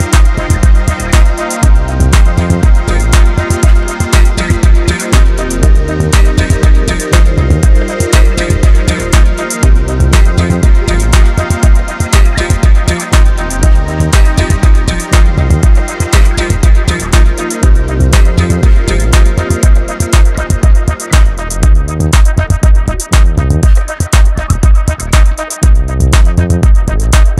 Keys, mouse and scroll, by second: 0.7-2.1 middle drag, 2.1 click, 3.5 click, 4.3 click, 5.6 KP_1, 6.1-6.6 scroll down 1, 6.6 Tab, 7.0 scroll up 1, 7.2 scroll down 1, 7.2-8.8 middle drag, 8.8-9.1 scroll down 3, 9.1 KP_3, 9.7 shift+middle click, 10.1 Tab, 10.4-12.1 middle drag, 12.1 click, 13.0 middle click, 13.6 click, 15.2 KP_1, 15.6-16.0 scroll down 1, 16.0-17.3 shift+middle drag, 17.3 scroll up 1, 17.4-19.7 middle drag, 19.7 ctrl+scroll up 1, 19.9 ctrl+r, 21.4 click, 21.8-22.9 middle drag, 22.9 click, 23.9 KP_1, 24.6 click, 26.8 click.